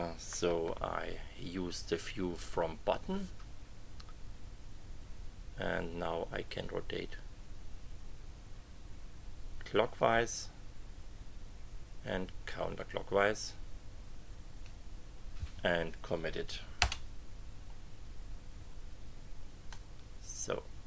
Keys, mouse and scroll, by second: 0.7 KP_5, 6.6-14.8 drag, 16.8 Return, 19.7-20.8 drag.